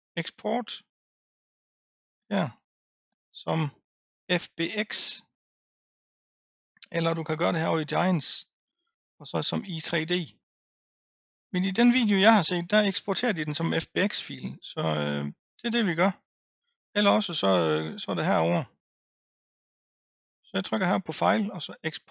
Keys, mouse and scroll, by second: 20.4-22.1 drag.